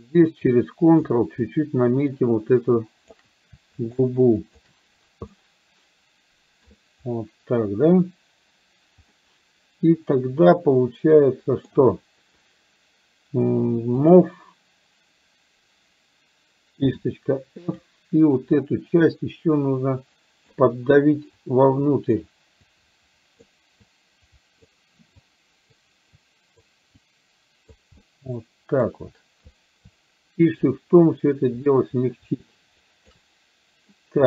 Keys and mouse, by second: 1.5-3.1 ctrl+drag, 3.9 shift+click, 4.5 shift+click, 5.4-6.7 middle drag, 9.1-11.9 middle drag, 14.1 click, 16.9 f, 19.1-20.6 drag, 21.5 click, 22.7 click, 24.0 click, 25.2 click, 26.2 click, 27.1 click, 28.1 middle click, 30.7-33.2 shift+drag.